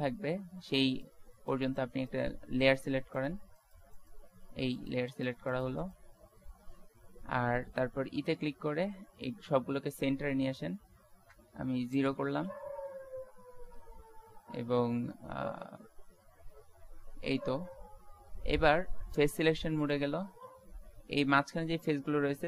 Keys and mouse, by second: 8.4 e, 12.7 z, 13.3 z, 16.0 Tab, 16.6 Tab, 17.7 Tab, 18.3 Tab.